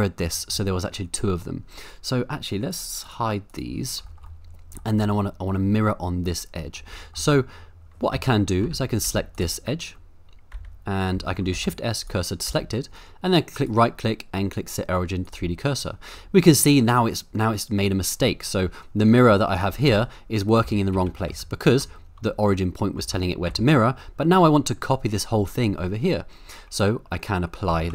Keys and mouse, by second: 0.3 middle drag, 2.7 click, 3.0 click, 3.5 click, 4.4 middle click, 6.7 middle click, 7.1 shift+middle click, 8.1 Tab, 8.6 Tab, 9.1 1, 10.5 Tab, 11.1 Tab, 11.5 shift+s, 12.5 Tab, 13.7-15.3 right drag, 16.2 middle click, 19.5 click, 19.8 click, 20.6 ctrl+z, 20.9 ctrl+z, 21.3 ctrl+z, 23.0 Tab, 23.5 Tab, 27.7 ctrl+a.